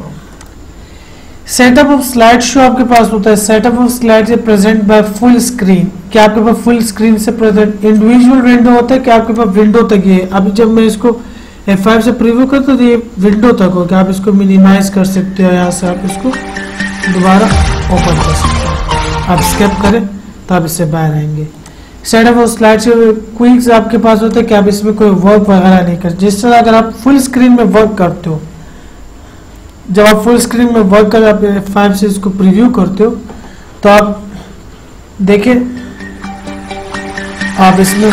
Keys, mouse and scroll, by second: 0.7 click, 8.3 click, 12.1 F5, 15.1 click, 18.3 click, 22.0 click, 24.6 click, 27.5 click, 30.4 click, 32.8 F5.